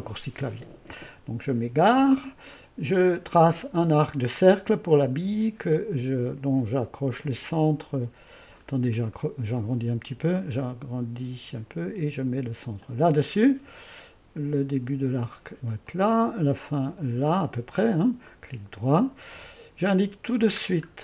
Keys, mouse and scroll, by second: 3.7-6.8 drag, 8.7 middle click, 9.1-12.0 drag, 12.8-14.2 drag, 15.8-20.6 drag, 20.6-21.0 scroll down 1.